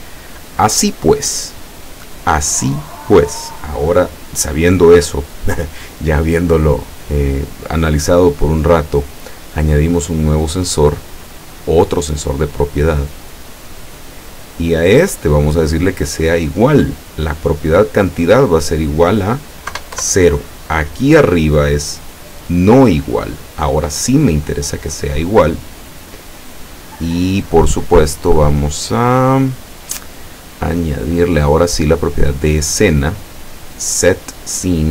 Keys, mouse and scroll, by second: 8.3-9.3 middle drag, 10.4 click, 12.4 click, 13.6 click, 14.3-14.9 middle drag, 14.8 click, 15.1 scroll up 1, 16.5 click, 17.4 click, 19.0 click, 19.8 KP_0, 20.1 KP_Enter, 22.0 click, 23.4 click, 24.7-25.5 middle drag, 26.0 click, 26.8 click, 27.2 click, 29.1 click, 31.8 click, 33.0 click, 33.9 click.